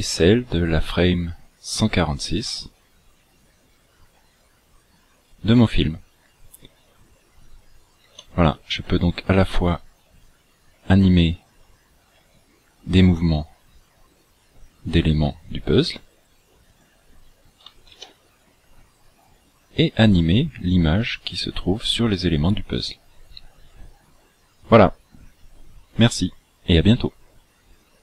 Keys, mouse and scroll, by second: 8.0 Escape, 12.1 g, 18.4 ctrl+z.